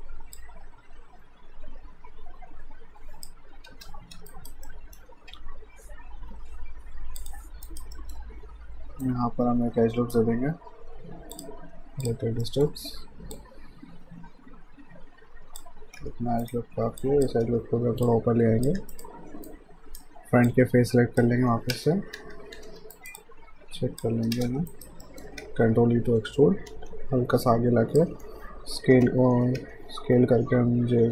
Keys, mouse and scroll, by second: 3.7 Return, 4.3 alt+right click, 4.7 alt+middle click, 5.3 q, 7.2 click, 7.7 alt+right click, 8.0 middle click, 9.0 right click, 11.4 click, 12.4 alt+middle click, 13.3 click, 16.0 q, 16.4 right click, 17.0 click, 17.4 w, 18.1 click, 18.8 q, 18.9 right click, 20.5 click, 21.7-22.6 typing, 22.9 alt+right click, 23.2 alt+click, 24.3 space, 24.7 alt+right click, 25.0 alt+middle click, 26.2 e, 27.5 click, 28.1 e, 29.3-31.1 typing.